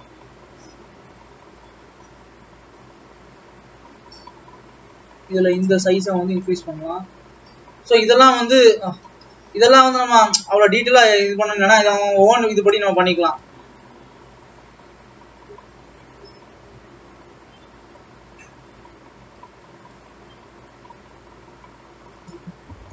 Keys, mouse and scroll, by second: 0.4-1.6 scroll up 1, 3.5-3.9 scroll down 2, 3.9-4.3 scroll up 2, 5.8 click, 7.7 f, 8.8 ctrl+z, 9.6 g, 11.2-12.4 middle drag, 12.4 click, 12.9 KP_3, 13.5 KP_1, 18.0 g, 22.6 Escape.